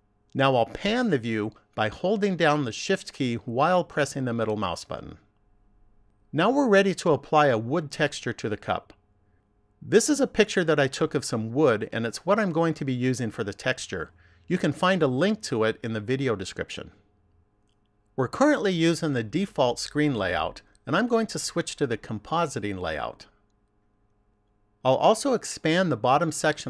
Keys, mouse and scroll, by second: 2.9 shift+middle click, 20.6 click, 26.4 click.